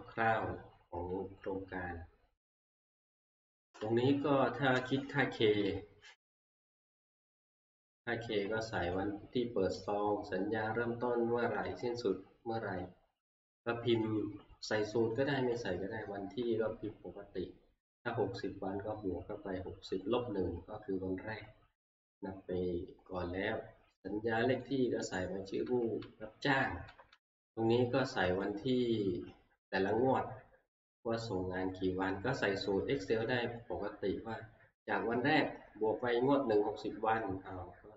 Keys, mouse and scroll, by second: 0.3 click, 2.7 click, 4.7 click, 5.6 Right, 5.9 Right, 6.2 Right, 6.4 Right, 6.7 Right, 6.9 Right, 7.2 Right, 7.4 Right, 8.9 click, 9.9 click, 11.7 click, 11.9 Right, 14.0 click, 15.7 click, 22.1 click, 23.3 Right, 24.6 click, 25.2 click, 25.3 Right, 25.7 Right, 26.2 Right, 26.3 Right, 26.6 Right, 26.8 Right, 27.2 Right, 28.5 click, 29.9 Right, 31.7 Right.